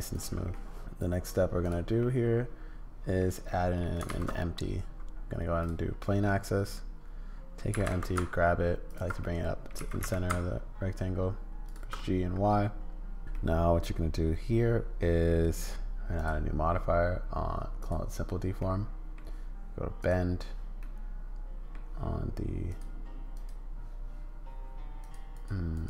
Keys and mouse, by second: 0.5 middle click, 1.2 click, 2.0-3.2 middle drag, 3.5 middle click, 4.1 shift+a, 6.0-7.6 middle drag, 7.7 g, 9.2 middle click, 9.8 g, 12.0-13.2 middle drag, 13.3-15.3 middle drag, 16.3-17.9 middle drag, 18.6 middle click, 20.0 middle click, 20.8 middle click, 22.7 click, 23.3 click, 25.0 click, 25.3 click, 25.7 click.